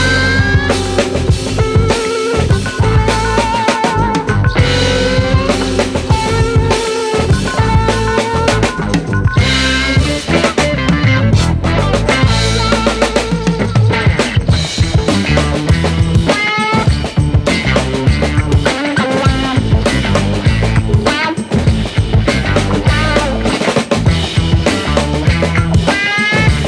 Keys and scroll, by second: 4.6 BackSpace, 7.0-8.4 typing, 24.6 ctrl+s, 26.5 ctrl+BackSpace.